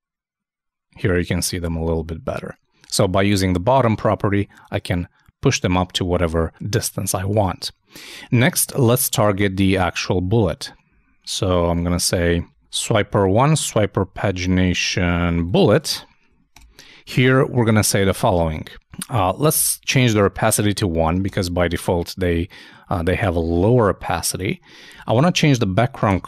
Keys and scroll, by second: 8.0 super+Tab, 8.8 super+Down, 11.3 shift+Up, 11.8 alt+shift+Down, 12.7 super+Down, 12.9 super+Right, 15.8 super+Down, 15.9 shift+super+Left, 16.5 shift+super+BackSpace.